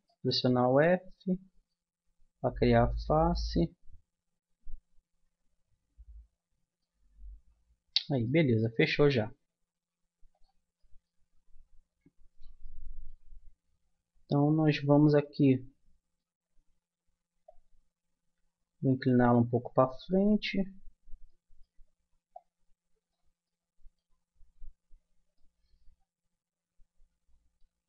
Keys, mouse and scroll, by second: 0.0 middle click, 1.0 middle click, 1.7-5.1 middle drag, 7.1-9.1 middle drag, 10.3-11.6 drag, 11.6 middle click, 12.3 right click, 12.8 middle click, 15.2-17.3 middle drag, 17.4-19.2 drag, 19.6-22.3 middle drag, 22.3-23.6 drag, 23.6-27.2 middle drag.